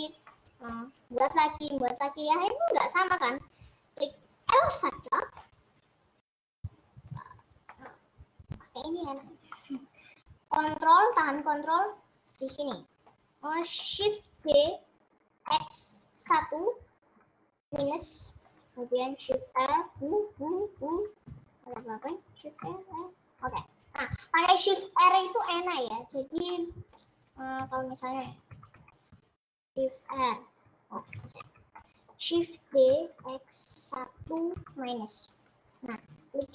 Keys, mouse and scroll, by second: 0.5-4.5 middle drag, 4.5 l, 6.6 middle click, 7.3 click, 7.8-9.3 middle drag, 9.3 click, 9.6-11.8 middle drag, 11.8 ctrl+click, 12.7 middle click, 13.3-13.7 scroll down 1, 13.7 middle click, 14.5 shift+d, 19.7 shift+r, 19.9 shift+r, 20.3 shift+r, 20.7 shift+r, 21.6 scroll down 2, 21.7-22.7 shift+middle drag, 22.7 shift+r, 23.5 shift+r, 24.0 scroll up 1, 26.9 middle click, 27.7-28.5 ctrl+z, 28.7 ctrl+z, 29.1 ctrl+z, 31.1 shift+r, 31.3 ctrl+z, 31.8 middle click, 32.7 shift+d.